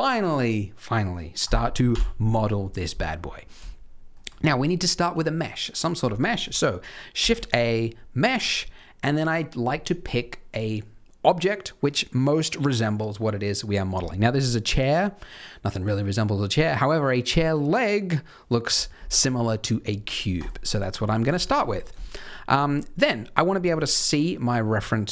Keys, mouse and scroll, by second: 1.8 KP_3, 3.1-3.5 scroll up 3, 3.6 shift+middle click, 7.1 shift+a, 20.9-21.2 scroll down 3, 21.3 shift+middle click, 21.6-22.0 scroll up 3, 22.0 shift+middle click, 22.9 middle click, 25.0 KP_3.